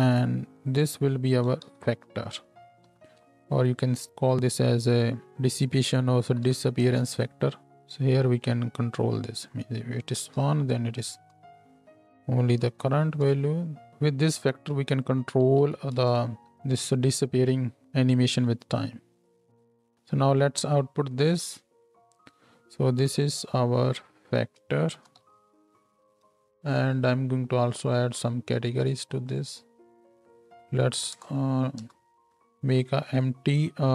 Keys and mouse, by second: 0.8 click, 2.9 shift+Left, 3.2 space, 13.9 space, 16.4 shift+Left, 18.1 space, 19.9 space, 23.0 n, 24.0 click, 28.0-29.3 drag, 29.3-33.9 middle drag.